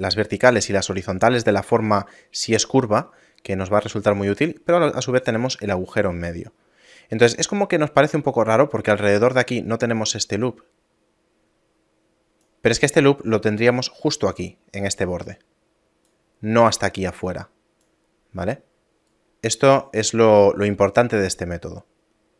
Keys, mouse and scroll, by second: 8.9 d, 9.2 click, 12.4-13.5 d, 13.5 click, 16.1-19.1 typing, 16.9 click, 19.1 right click.